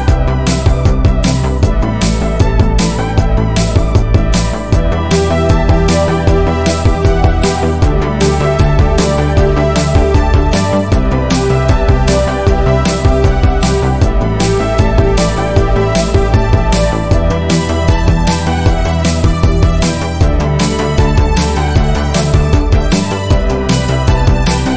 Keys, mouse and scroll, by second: 2.5 r, 4.5 r, 7.8 s, 9.6 click, 10.0-11.0 middle drag, 11.0 alt+click, 11.8 alt+click, 12.6 alt+click, 13.3 alt+click, 13.9-15.6 shift+middle drag, 15.6 r, 18.8-20.0 middle drag, 20.0-20.6 scroll up 1, 20.6 r, 24.3 KP_1.